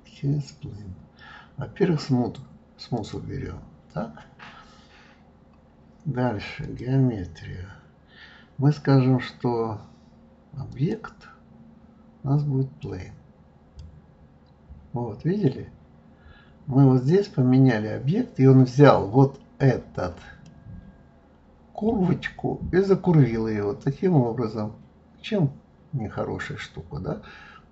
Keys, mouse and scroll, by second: 0.1-1.0 scroll down 1, 2.9 click, 6.6 click, 10.7-13.7 drag, 20.4-23.4 middle drag.